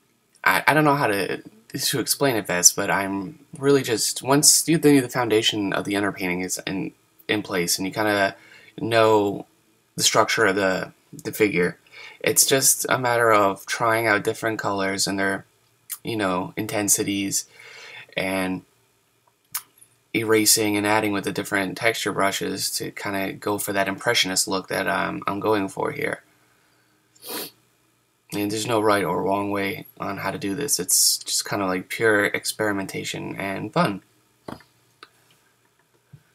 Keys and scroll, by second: 8.5 ctrl+z, 17.8 super+z, 21.0 super+z, 21.8 ctrl+z.